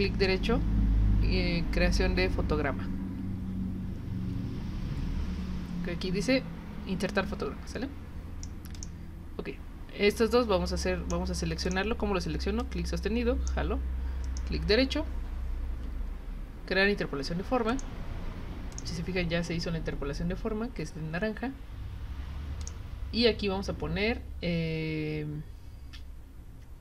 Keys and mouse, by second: 0.3 right click, 8.7 click, 10.1-11.1 drag, 11.7 click, 12.6-13.5 drag, 17.7 click, 18.7 click, 22.6 click.